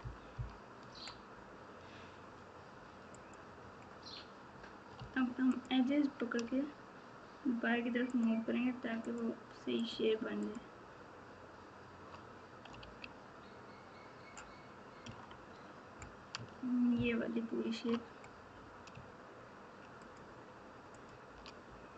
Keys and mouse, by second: 0.0 KP_4, 0.3 KP_4, 0.8 Tab, 15.1 KP_3, 16.9 ctrl+KP_6, 20.1-21.4 shift+drag, 21.9 KP_4.